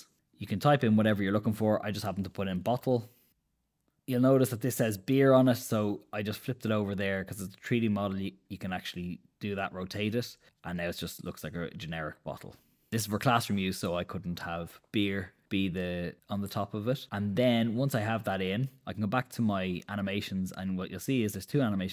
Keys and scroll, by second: 2.1-3.7 typing, 4.3 super+z.